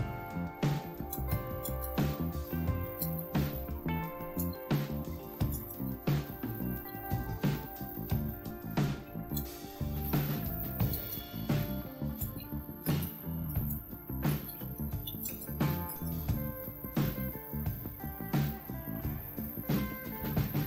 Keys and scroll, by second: 0.9-20.6 typing.